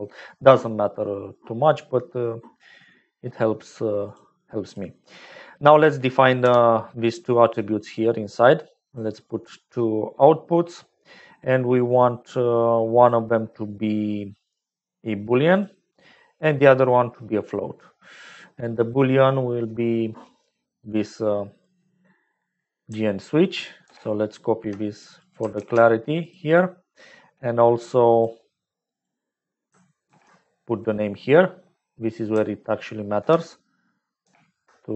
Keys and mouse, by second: 2.0 middle click, 2.4 middle click, 3.0 middle click, 4.0 click, 4.4 click, 6.4 n, 8.8 click, 9.1 click, 13.0-15.7 drag, 17.4 middle click, 18.8-21.9 drag, 23.8 ctrl+c, 24.9-26.3 drag, 28.1 click, 28.9 click, 30.0 ctrl+v, 31.3 middle click, 31.4 click, 33.5 ctrl+c, 34.2 ctrl+v.